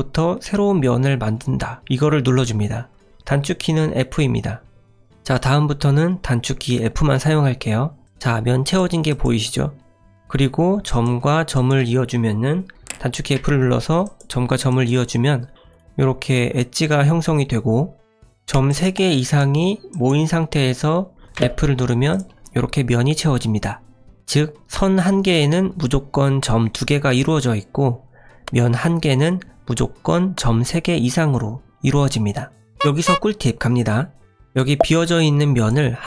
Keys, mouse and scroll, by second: 8.0 click, 8.6 click, 9.7 click, 11.5 shift+click, 13.3 f, 14.0 click, 14.7 click, 16.0 click, 18.3 click, 18.7 shift+click, 21.4 f, 22.1 click, 34.5 click, 35.2 click.